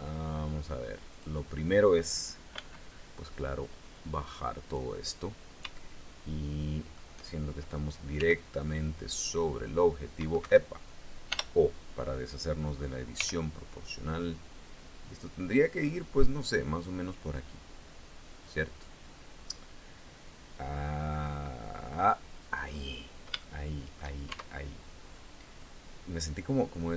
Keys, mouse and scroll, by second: 0.7 click, 2.1 b, 3.5-4.5 drag, 5.3-6.7 shift+drag, 7.7 g, 10.0 Escape, 10.8 o, 12.7 g, 21.5 click, 22.2-22.5 scroll down 2, 23.0 shift+click, 23.8 shift+Tab.